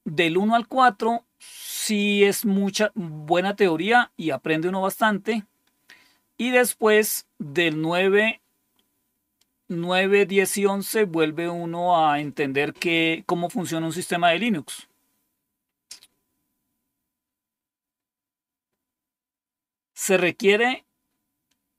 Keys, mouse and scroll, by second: 5.0-9.3 scroll down 4.